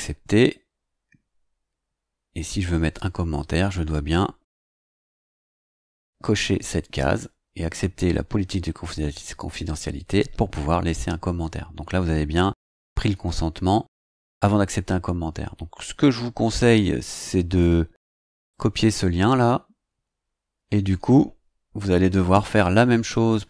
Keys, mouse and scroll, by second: 0.4-1.1 scroll down 4, 1.5-2.3 scroll down 4, 2.7-3.3 scroll down 2, 4.9 click, 16.0-17.7 drag, 18.4-21.0 drag, 22.2 ctrl+c.